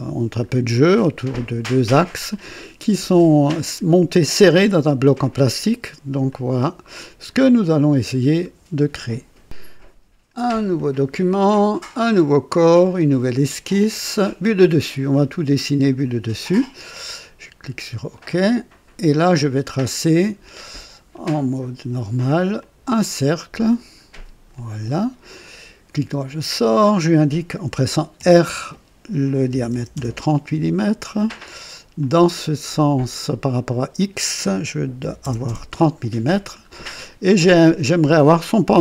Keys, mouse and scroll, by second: 2.3 click, 3.5 right click, 6.2-7.4 drag, 10.7 click, 11.9 click, 12.8 click, 15.7 click, 18.1 click, 21.1 click, 22.5 click, 23.6 click, 24.5 click, 25.0 right click, 26.6 click, 28.1 r, 29.4 KP_3, 29.6 KP_0, 29.9 KP_Enter, 31.9 click, 33.5 click, 34.9 KP_3, 35.1 KP_0, 35.2 KP_0, 35.4 Return, 35.4 Return, 36.6 scroll down 1, 36.9-37.6 right drag, 38.2 typing.